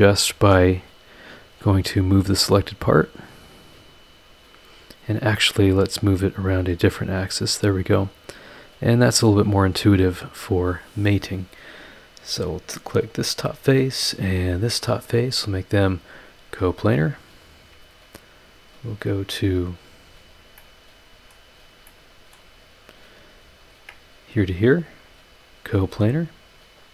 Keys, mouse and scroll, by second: 1.4 click, 3.0-5.0 drag, 5.8-9.5 drag, 10.4 click, 11.3 scroll up 2, 12.2 scroll up 2, 13.0 click, 13.7-14.0 scroll up 2, 14.5 ctrl+click, 15.9 click, 16.5-16.8 scroll down 2, 17.4 click, 17.8-18.3 scroll up 2, 18.4 scroll down 2, 20.2 click, 20.6 middle click, 20.7 click, 21.5 scroll down 1, 21.9 click, 22.5-22.8 scroll up 1, 23.7 ctrl+click, 25.1 click, 25.8 scroll down 1, 26.8 click.